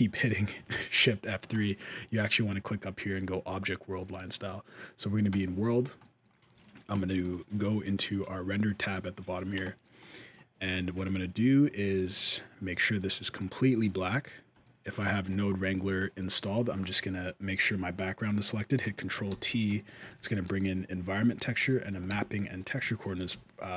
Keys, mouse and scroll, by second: 1.3 click, 5.5 scroll up 3, 5.8 middle click, 6.7 middle click, 7.1-8.1 scroll down 3, 7.4 z, 9.0 scroll up 1, 9.0 middle click, 9.4 shift+middle click, 9.7-10.4 scroll down 2, 9.9 middle click, 11.9 click, 13.7 middle click, 14.0-14.8 scroll down 2, 14.3 click, 14.9 shift+middle click, 19.1 ctrl+t, 19.6 shift+middle click, 20.3 alt+a, 20.3 b, 21.5 shift+middle click, 21.9 g, 22.8 shift+middle click, 23.1 g.